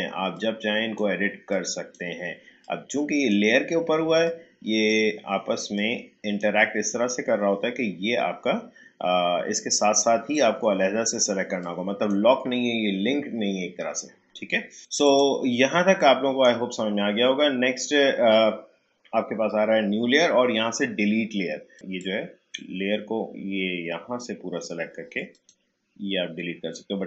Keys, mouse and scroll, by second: 10.3-14.6 drag, 14.8 click, 15.7 space, 16.0 click, 16.2 space, 21.7-25.3 drag.